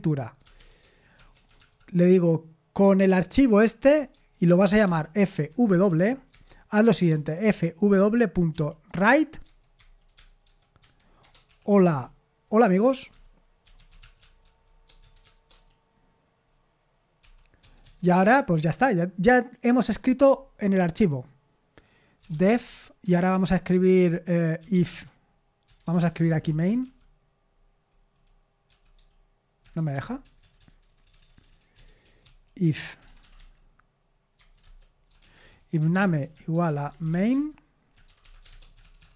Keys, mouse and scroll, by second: 0.0-1.6 typing, 4.1-8.9 typing, 6.3 Return, 9.4 Tab, 10.2-15.0 typing, 15.5 Escape, 17.2-17.8 typing, 18.2 Return, 21.9-27.3 typing, 28.7-33.9 typing, 34.4 Tab, 34.6 Return, 35.1-38.5 typing.